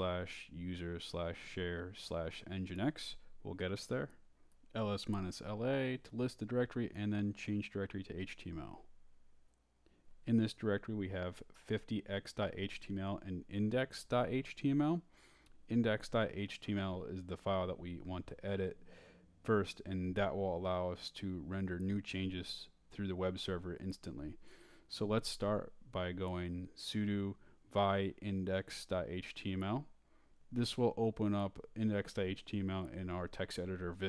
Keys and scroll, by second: 0.0-2.8 typing, 2.8 Tab, 4.2 Return, 4.6-6.0 typing, 7.4-10.3 typing, 9.3 Return, 12.8 Return, 16.5 Return, 22.0 Return, 23.0 Return, 25.8 Return, 27.4-31.6 typing, 32.1 Return, 33.3 Down.